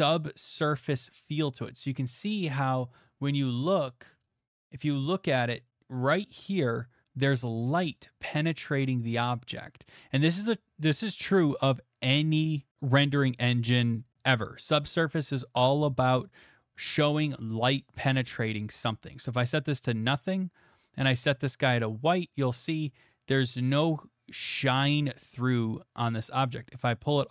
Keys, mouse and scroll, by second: 1.4 middle click, 2.0 middle click, 2.2 middle click, 2.2 middle click, 4.1 middle click, 4.5 middle click, 4.8 shift+middle click, 5.3 middle click, 5.7 middle click, 19.5 click, 20.8 click, 22.1 click.